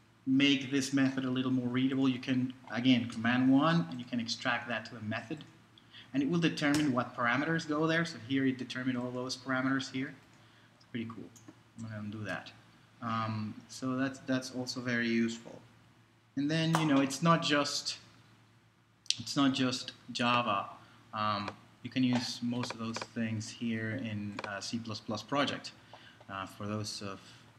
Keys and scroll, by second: 3.1 super+i, 6.7 Return, 11.8 super+z.